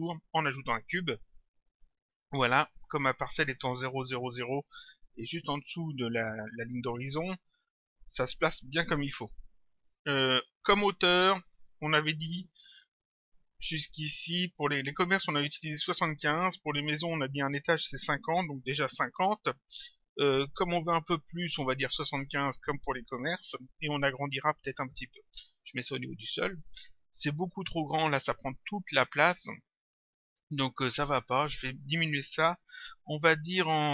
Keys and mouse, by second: 1.3 click, 6.5 click, 17.5 click, 19.3 Return, 22.1 click, 24.0 Return, 26.4 click, 30.9 click.